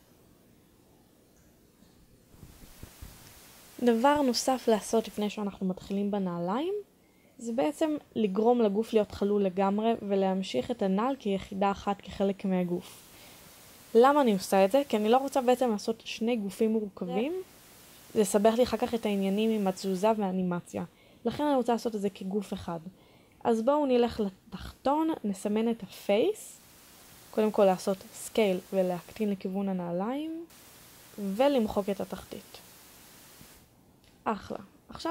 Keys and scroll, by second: 11.6 a, 12.0 b, 14.9 b, 27.6 s, 34.3 Delete.